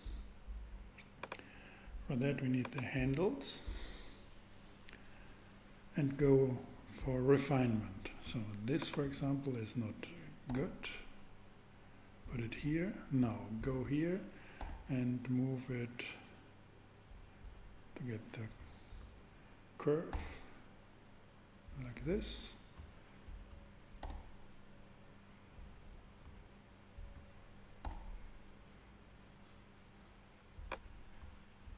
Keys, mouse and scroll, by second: 1.2-4.4 drag, 10.5 g, 14.6 super+g, 20.1 g, 21.7 click, 24.0 g, 24.5 g, 27.8 super+g, 28.9 click, 31.0 super+click.